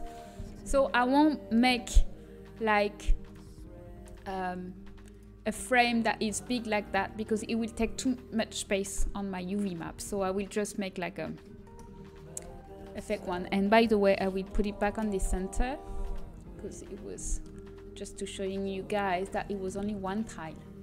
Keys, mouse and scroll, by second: 0.0-1.5 drag, 1.5 shift+a, 4.0 s, 6.2 KP_7, 12.1 ctrl+z, 12.6 ctrl+z, 13.2-16.1 right drag, 16.1 g, 16.9-18.5 middle drag, 18.5 KP_7.